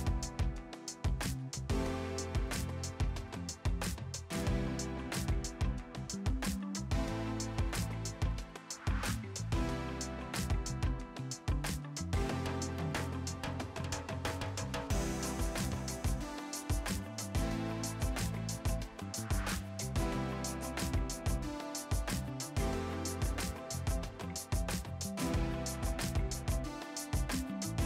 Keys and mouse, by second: 0.1 click, 0.6 h, 1.2 Return, 1.5 ctrl+shift+x, 1.7 click, 2.3 shift+click, 3.0 click, 4.4 click, 4.7 right click, 5.4 click, 9.0 click, 9.4 Delete, 9.6 click, 12.1 right click, 13.1 click, 14.1 ctrl+shift+x, 14.2 click, 14.9 KP_1, 15.1 Return, 15.5 click, 15.8 right click, 16.0 click, 17.6 right click, 17.8 click, 18.3 right click, 18.8 click, 19.1 right click, 19.4 click, 19.6 Delete, 21.2 click, 21.5 click, 22.3 KP_3, 22.7 Return, 24.0 click, 24.3 Delete, 24.4 click, 24.9 Delete, 26.8 click, 27.1 ctrl+shift+x, 27.2 click, 27.5 1.